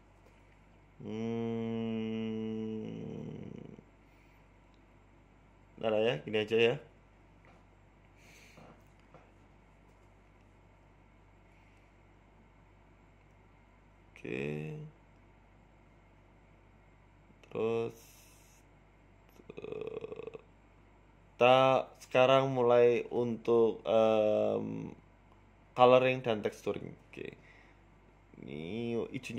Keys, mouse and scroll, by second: 3.3 ctrl+s, 3.9 z, 5.1 z, 8.5 ctrl+s.